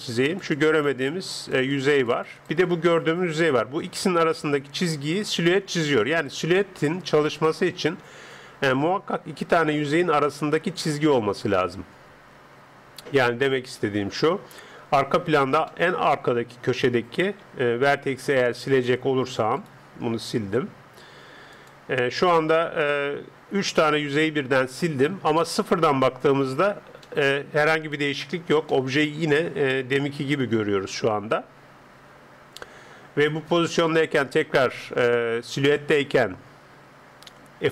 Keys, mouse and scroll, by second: 5.4 d, 5.9 d, 9.3 d, 13.8-17.4 middle drag, 17.4 Tab, 18.8 click, 19.6-21.6 right drag, 20.4 x, 22.2-25.4 middle drag, 25.5 KP_0, 27.1-30.5 middle drag, 28.2 Tab, 30.7 n, 31.3-34.3 middle drag, 34.3 click, 34.3 n.